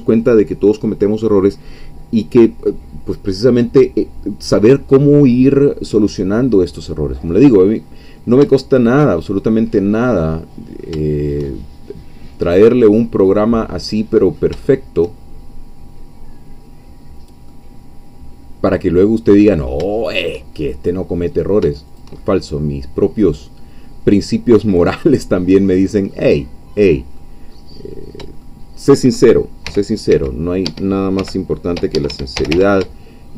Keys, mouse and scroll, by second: 6.7-7.3 scroll down 2, 7.3-9.1 middle drag, 9.3-9.7 shift+scroll up 3, 9.7-14.5 middle drag, 14.7 shift+middle click, 15.3-17.5 shift+scroll up 1, 17.5-20.8 middle drag, 21.4 click, 21.9 shift+click, 22.2-24.7 shift+middle drag, 24.7-25.0 scroll down 1, 25.6 scroll up 1, 26.1-27.5 middle drag, 27.5-28.2 scroll up 1, 28.2 shift+scroll up 1, 28.4-29.4 shift+middle drag, 29.7 g, 30.1 x, 30.6 Escape, 31.2-33.0 typing, 32.1 Escape.